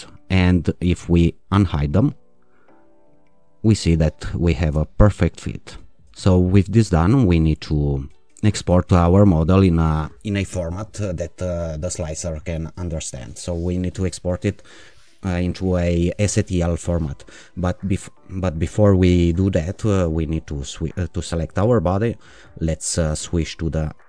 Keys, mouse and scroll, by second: 1.0 click, 3.2 click, 21.7 alt+shift+click, 23.1 click.